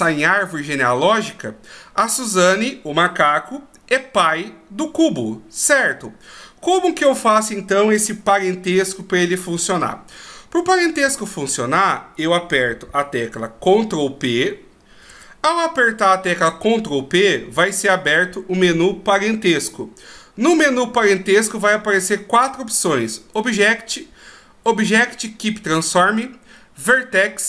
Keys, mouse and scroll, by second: 15.3 ctrl+p.